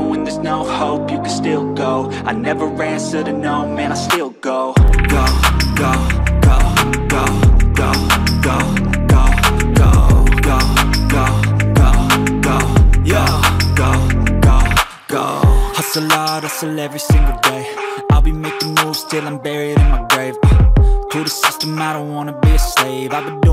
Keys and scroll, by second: 1.6 ctrl+j, 2.0 ctrl+t, 7.2 ctrl+j, 7.7 ctrl+t, 19.7 ctrl+t.